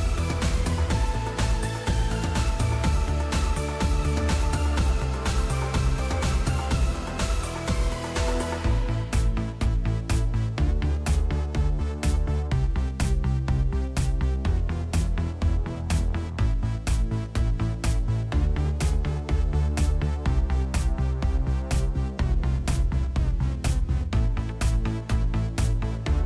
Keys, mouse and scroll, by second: 1.2 click, 9.7 click, 14.8 click, 21.6 click, 24.2 click.